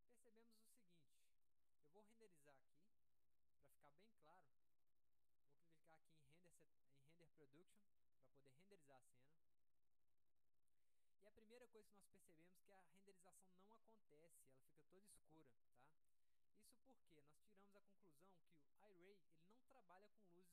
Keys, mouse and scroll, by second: 0.5-1.1 scroll up 2, 0.8 middle click, 1.3 alt+middle click, 1.9 alt+middle click, 3.7 middle click, 3.9-4.7 scroll up 2, 4.2-5.5 middle drag, 7.9 click.